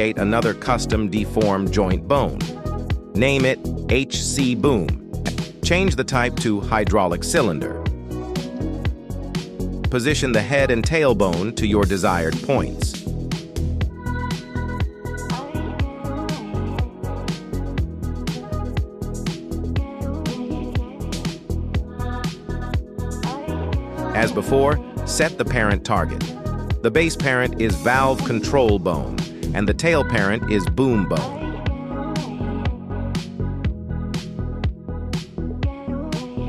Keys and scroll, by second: 1.0 BackSpace, 1.9 b, 2.1 o, 2.5 m, 3.1 Return, 8.1 g, 8.5 Tab, 9.8 shift+s, 10.9 z, 11.4 r, 12.1 Escape, 12.9 Tab, 13.8 shift+s, 14.2 Tab, 15.0 r, 15.5 Escape, 16.8 shift+s, 18.8 Tab, 21.1 shift+s, 28.9 g, 28.9 Escape, 33.5 g, 34.4 Escape, 35.5 KP_3.